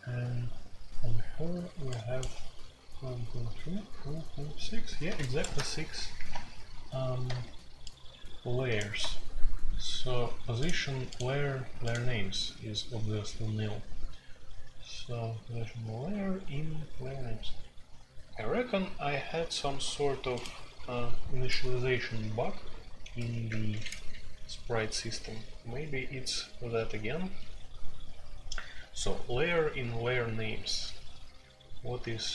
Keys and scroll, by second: 5.4 shift+super+c, 22.5-23.6 typing, 25.3 typing, 27.2 typing.